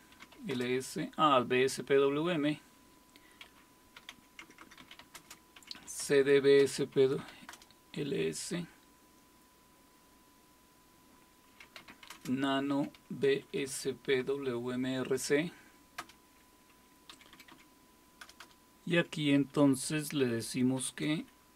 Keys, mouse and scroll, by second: 0.0-0.9 typing, 3.4-7.7 typing, 11.4-13.3 typing, 16.0 Return, 16.0 typing, 17.1 Down, 17.3 Down, 17.5 Down, 18.2 Return, 18.4 Return, 18.9 Up, 20.6-21.5 typing.